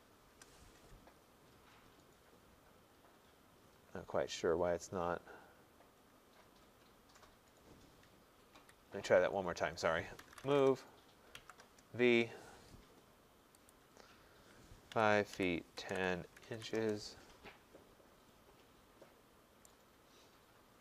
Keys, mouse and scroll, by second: 0.0-0.3 typing, 8.5 Escape, 10.0-11.6 typing, 13.7-15.9 drag, 14.7-16.9 typing, 18.9-19.3 scroll.